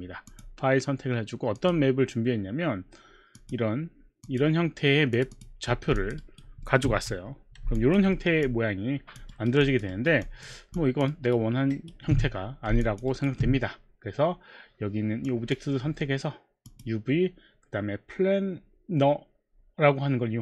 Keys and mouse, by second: 0.3 click, 1.6 click, 3.4 click, 4.2 click, 5.1 click, 5.3 click, 6.0 alt+click, 6.3 alt+right click, 6.3 alt+click, 6.6 alt+middle click, 7.1 6, 7.6 6, 7.7 alt+click, 8.4 alt+click, 8.4 alt+middle click, 9.3 alt+right click, 9.3 alt+click, 9.6 alt+click, 9.9 alt+right click, 10.2 alt+click, 10.8 alt+click, 11.2 alt+right click, 11.2 alt+click, 11.7 alt+right click, 12.9 alt+click, 13.4 alt+right click, 13.4 alt+click, 15.3 click, 16.7 click.